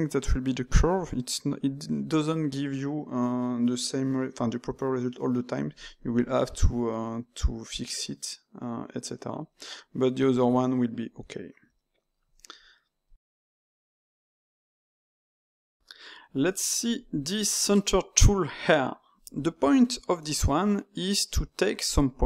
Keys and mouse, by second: 16.1-19.5 middle drag, 19.6-21.8 shift+middle drag, 21.8 alt+click.